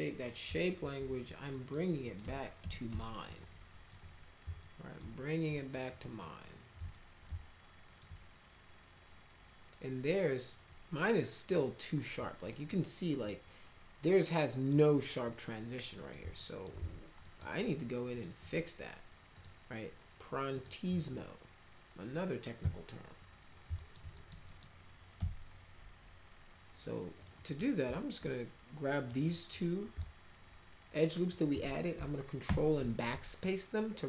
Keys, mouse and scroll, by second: 0.8 alt+x, 1.5 middle click, 2.0 click, 2.2 F3, 2.6 F3, 2.9 F4, 3.7 middle click, 4.6 alt+middle click, 5.6 middle click, 6.2 middle click, 6.8 middle click, 7.3 alt+middle click, 12.5 middle click, 16.0 middle click, 16.4 alt+middle click, 16.8 z, 17.2 right click, 18.1 click, 19.3 click, 20.6 click, 23.8 alt+middle click, 24.2 middle click, 24.5 middle click, 25.1 F4, 27.2 click, 27.4 click, 29.1 ctrl+click, 29.2 ctrl+click, 30.0-31.3 alt+middle drag, 32.5 ctrl+BackSpace, 33.4 middle click.